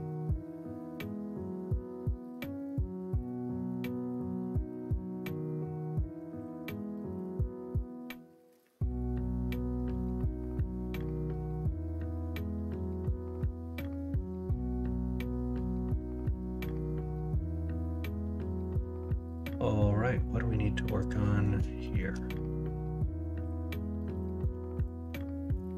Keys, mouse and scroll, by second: 1.5-2.1 middle drag, 11.7-12.1 middle drag, 12.6-13.0 shift+middle drag, 16.7 middle drag, 17.1 shift+middle drag, 17.5 middle drag, 18.1 middle drag, 19.1-21.4 middle drag, 21.8 shift+middle drag, 22.6-24.4 middle drag, 25.0-25.4 middle drag.